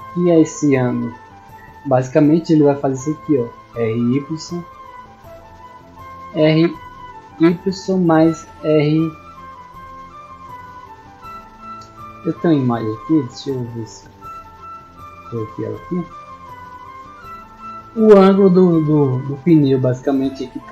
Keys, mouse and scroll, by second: 0.2-0.5 middle drag, 1.1-1.4 middle drag, 2.3 right click, 3.3 r, 5.4 right click, 6.3 r, 11.8 right click, 14.0 click, 15.5 click, 16.3 click, 16.9 scroll down 2, 17.4 middle click.